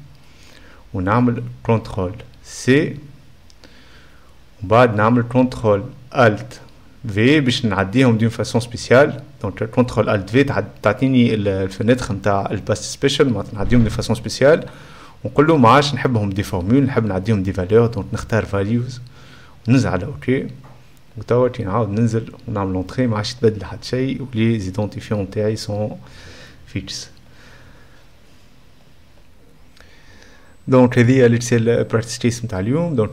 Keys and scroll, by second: 0.6 4, 1.1 z, 2.5 ctrl+c, 7.5 ctrl+alt+v, 7.8 e, 9.3-10.2 typing, 22.2-23.5 typing, 22.4 Return.